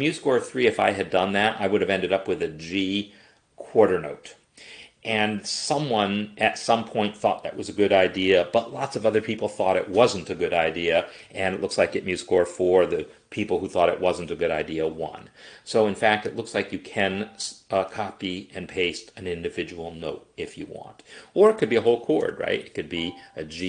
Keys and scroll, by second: 22.2 shift+b, 22.9 Escape.